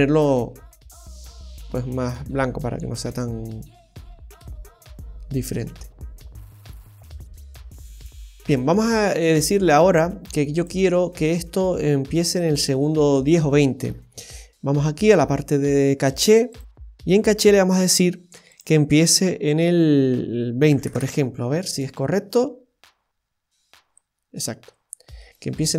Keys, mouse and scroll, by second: 5.1-5.7 scroll up 2, 6.2 middle click, 7.8 space, 9.2-9.8 scroll down 1, 10.6 click, 11.2 middle click, 12.2 right click, 13.9-14.6 scroll down 10, 15.1 scroll down 3, 15.9-16.5 scroll down 1, 16.5 click, 16.8-17.2 scroll down 4, 18.5 click, 21.6 space, 25.1 scroll up 1, 25.3 middle click.